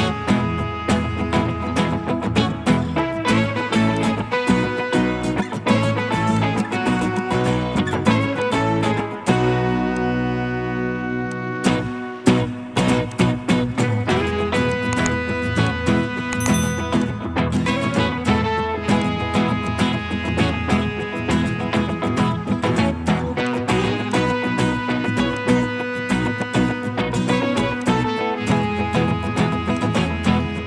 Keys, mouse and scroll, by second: 0.7 scroll up 1, 12.4 Escape, 12.7 Escape, 15.7 ctrl+click, 19.7 ctrl+click.